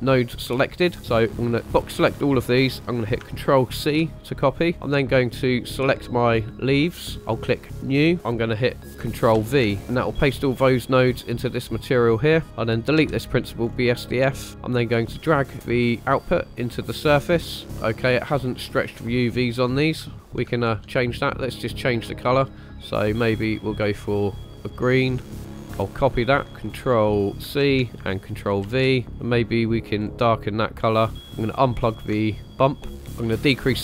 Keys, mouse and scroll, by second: 1.3-1.6 drag, 3.7 ctrl+c, 6.3 click, 7.7 click, 9.3 ctrl+v, 9.8 click, 12.3 click, 13.0 Delete, 13.6 scroll up 2, 14.1 middle click, 14.5-16.9 drag, 17.6 shift+middle click, 17.6 scroll up 2, 20.1 shift+middle click, 20.5 shift+middle click, 22.1 click, 27.4 ctrl+c, 28.6 ctrl+v, 29.0 click, 31.4 ctrl+right click, 32.9 scroll up 4, 33.2-33.8 drag.